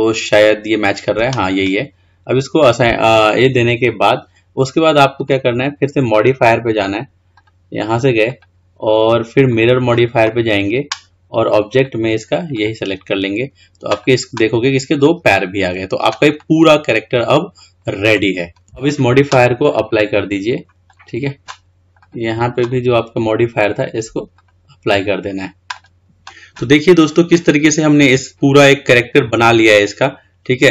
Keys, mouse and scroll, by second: 5.3 click, 7.5 drag, 8.5-11.4 drag, 11.9 click, 14.1 drag, 15.2-18.6 middle drag, 20.0-22.8 drag, 24.5-26.0 drag, 26.9-27.7 scroll up 2, 27.7-28.2 scroll down 2, 28.2-30.7 middle drag.